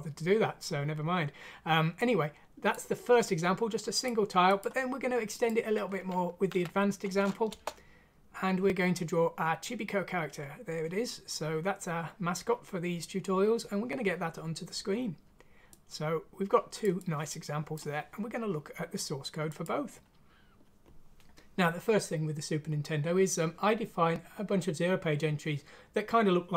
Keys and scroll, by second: 6.4 F6, 7.4 Return.